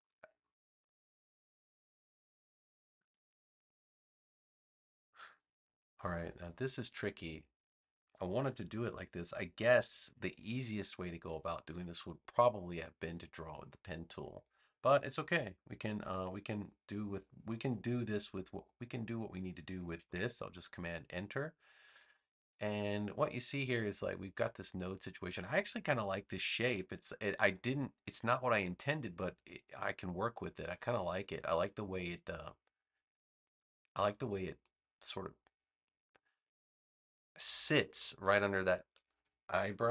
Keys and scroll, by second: 2.9 a, 9.6 super+=, 10.7 space, 20.0 super+Return, 26.6 v.